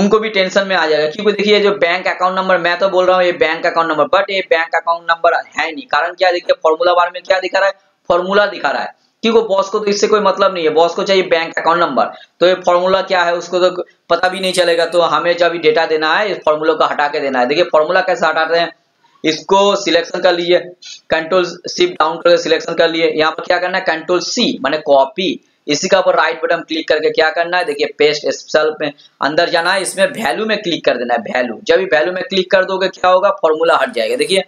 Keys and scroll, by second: 20.3 shift+Down, 24.2 ctrl+c.